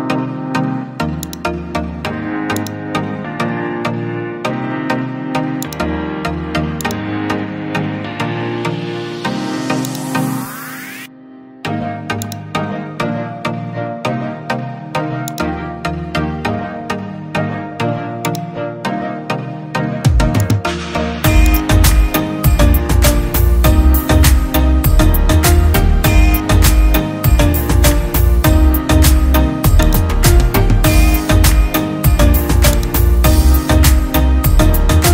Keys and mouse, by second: 9.7-35.1 drag.